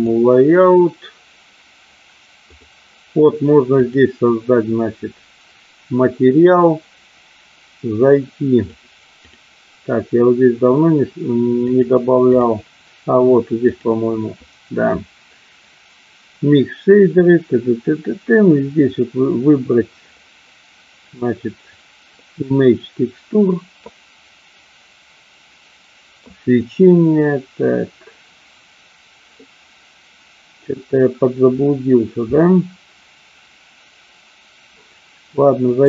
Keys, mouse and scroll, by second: 3.9 click, 8.7 click, 11.8 click, 13.5-26.8 drag.